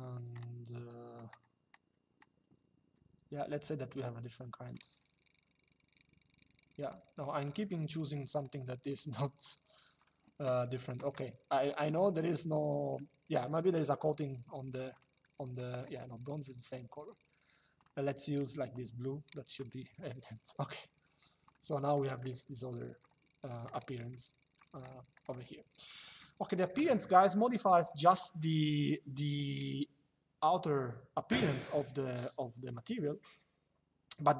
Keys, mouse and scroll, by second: 3.6 click, 7.1 click, 9.7 click, 14.6 click, 17.5 click, 21.2 click, 22.0 shift+middle click, 23.8 shift+middle click, 27.7 click.